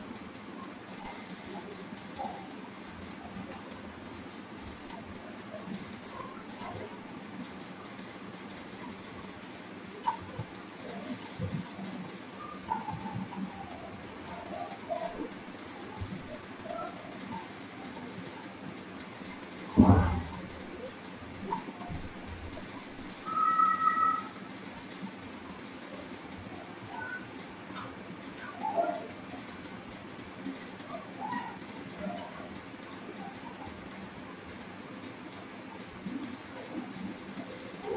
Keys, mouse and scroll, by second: 0.2-0.7 scroll up 5, 1.1 scroll up 2, 1.8 scroll up 1, 2.7 scroll down 1, 3.2 scroll up 1, 3.9 shift+click, 6.5 scroll up 1, 7.1 shift+middle click, 8.1 click, 10.1 click, 11.5 click, 11.8 click, 14.0 shift+click, 18.2-19.0 scroll down 12, 19.7-20.3 scroll up 4, 21.7 shift+middle click, 25.5 click, 32.7 click, 33.5 click.